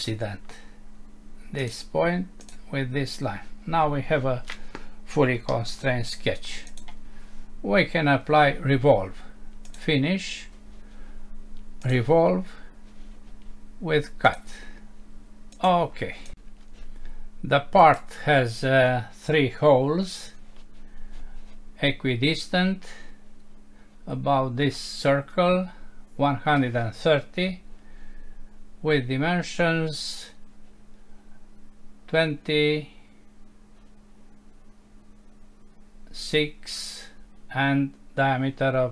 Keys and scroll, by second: 5.5 Home.